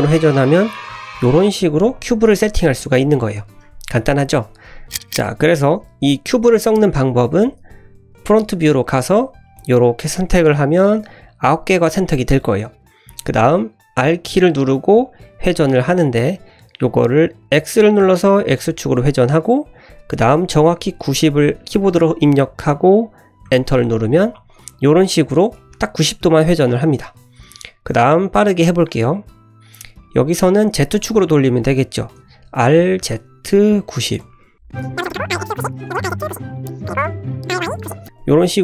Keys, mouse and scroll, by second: 2.3 ctrl+z, 3.1 scroll down 1, 3.2-3.5 middle drag, 4.8 shift+middle click, 4.8 click, 4.8 scroll down 3, 5.2 middle click, 5.5 shift+middle click, 7.0 middle click, 7.6 `, 8.2-8.5 scroll up 3, 8.6 shift+middle click, 9.1 click, 9.5 click, 10.7-11.1 scroll down 2, 10.8-11.1 middle drag, 12.7-13.0 scroll down 1, 13.1 middle click, 14.0 r, 24.4 click, 24.8 middle drag, 25.1-25.4 scroll up 2, 25.5 middle click, 27.0 `, 27.4-27.8 scroll down 1, 27.9-28.9 drag, 30.0 middle drag, 32.2 r, 34.6 `, 34.8 click, 35.1 r, 35.8 click, 36.0 r, 36.4 click, 36.7 scroll down 1, 36.8 middle click, 37.0 `, 37.2 click, 37.5 r, 38.1 click, 38.5-38.6 middle drag.